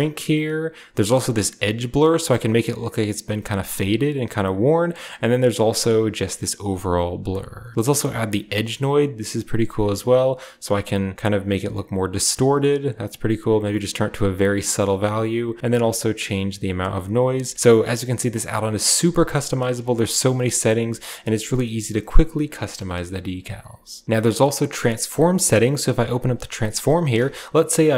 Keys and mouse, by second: 0.6-3.7 drag, 4.8-6.9 drag, 8.1 click, 9.4-14.5 drag, 14.9-17.1 drag, 17.9 middle click, 20.1 click, 21.3 shift+drag, 21.9 click, 27.2 shift+click.